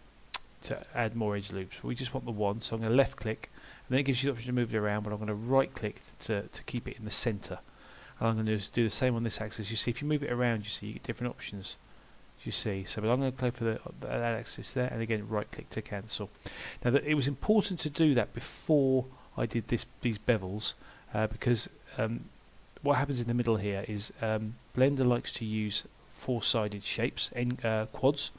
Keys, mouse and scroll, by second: 6.5 middle click, 8.3 ctrl+r, 15.5 middle click, 23.9 scroll up 1, 24.4 middle click, 25.0 scroll up 1, 25.8 shift+middle click, 25.8 scroll up 1.